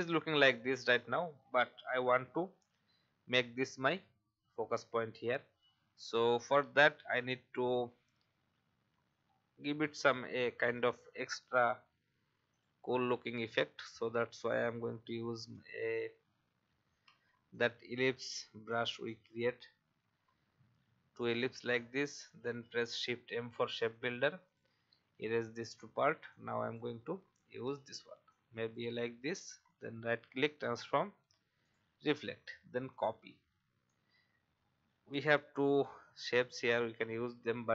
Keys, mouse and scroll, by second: 5.0 alt+scroll up 1, 5.6 alt+scroll down 1, 10.7-11.0 alt+scroll down 1, 12.5 click, 13.6 alt+scroll up 1, 14.5 click, 16.1 alt+scroll up 1, 16.9-17.2 alt+scroll up 1, 17.5 alt+click, 19.1-20.2 drag, 22.9 shift+m, 23.8 alt+click, 24.4 alt+click, 25.1 alt+v, 25.6 click, 27.3-28.2 alt+scroll up 1, 28.3 shift+click, 29.5 right click, 31.6 click, 34.1 Left, 34.6 Left.